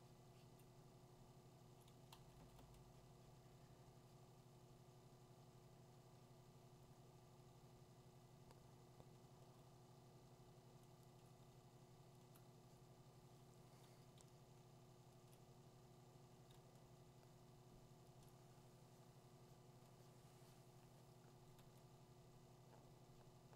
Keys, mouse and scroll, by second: 1.7 click, 2.4 2, 2.6 3, 10.1 click, 11.2 click, 12.3 click, 15.3 click, 18.2 click, 21.6 2, 22.2 [.